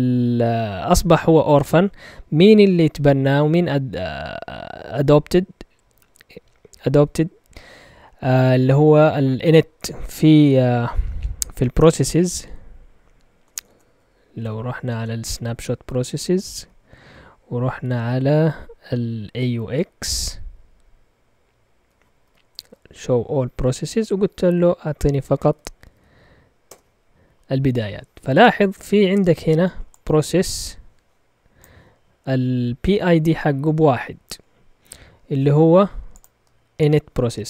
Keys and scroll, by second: 11.7-18.1 typing, 13.8 Caps_Lock, 21.9-26.4 typing, 26.6 Return.